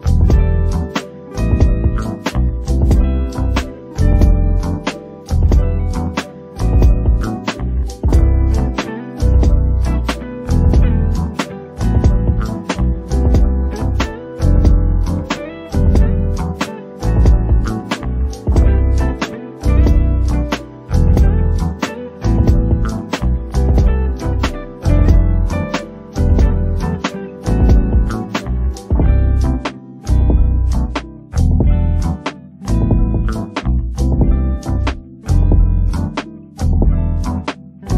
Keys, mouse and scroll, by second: 1.3 click, 1.5 g, 2.5 click, 2.6 g, 3.6 click, 3.7 g, 4.4-4.8 scroll up 2, 4.8 click, 4.8 g, 5.9 KP_1, 6.4 KP_Decimal, 7.0-7.6 scroll up 5, 7.6-10.1 typing, 8.9 click, 9.4 click, 10.1 click, 11.4 click, 11.5-14.0 typing, 11.9 click, 12.4 click, 13.3 click, 13.9 click, 14.7 shift+click, 14.9 click, 15.2-15.5 scroll up 2, 15.5 alt+a, 15.8 scroll down 2, 16.0 click, 16.3 click, 16.6 click, 16.8 click, 17.2 ctrl+z, 17.4 click, 17.8 alt+a, 17.9-18.2 scroll down 7, 18.2 shift+middle click, 18.5 alt+click, 18.8-19.7 scroll up 2, 19.7 KP_1, 20.0 scroll down 1, 20.1 shift+middle click, 20.9 click, 21.3 click, 21.8 shift+middle click, 22.2 scroll up 2, 22.4 click, 22.6 click, 23.0 shift+middle click, 23.2 scroll up 4, 23.4 click, 23.7 click, 24.3 click, 24.5 click, 24.9 click, 25.2 shift+click, 25.9 z, 26.7 shift+click, 26.8 shift+click, 27.2 click, 27.6 scroll down 1, 27.7 shift+middle click, 28.3-28.6 scroll down 6, 28.6 shift+middle click, 28.8-29.2 scroll up 3, 29.2 click, 29.5 click, 30.1 click, 30.3 click, 30.5 scroll down 3, 30.6 shift+middle click, 31.5 alt+click, 31.8 scroll down 3, 32.0 middle click, 32.7 KP_3, 33.0 scroll up 2, 33.5 e, 34.0 click, 34.5-35.7 middle drag, 36.0 shift+middle click, 36.5 click, 37.1 shift+middle click, 37.3 scroll up 3, 37.5 shift+middle click.